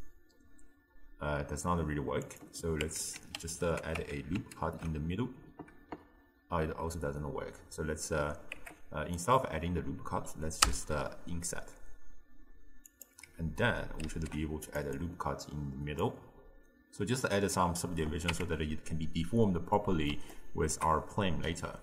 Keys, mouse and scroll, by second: 2.4-2.9 drag, 2.9 Tab, 4.6 ctrl+r, 10.7 i, 14.1 ctrl+r, 16.3-18.3 drag, 18.3 Tab, 19.8-21.8 middle drag.